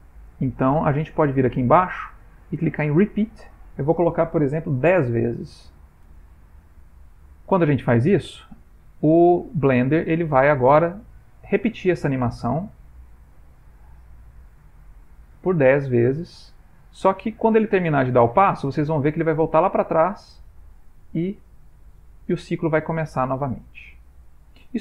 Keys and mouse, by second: 3.4 click, 7.0 ctrl+middle click, 8.4 ctrl+middle click, 9.9 click, 13.5 click, 14.4 space.